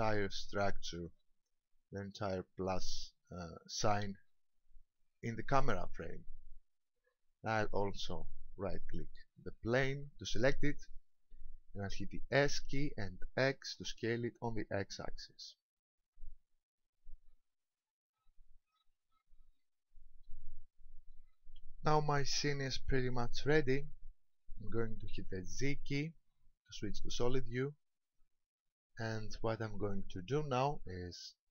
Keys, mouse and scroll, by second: 2.9-4.3 scroll up 2, 9.3 right click, 12.7 s, 18.7 ctrl+click, 19.6 middle click, 21.2 KP_0, 25.7 z.